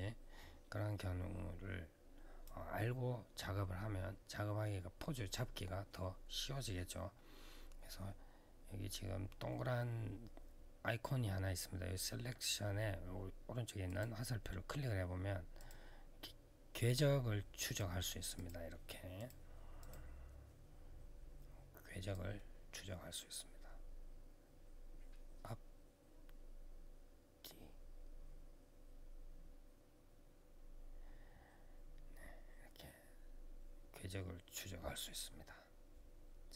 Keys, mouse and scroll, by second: 13.6 click, 15.3 click, 17.4 click, 18.1 click, 18.9 click, 19.5 click, 21.9 click.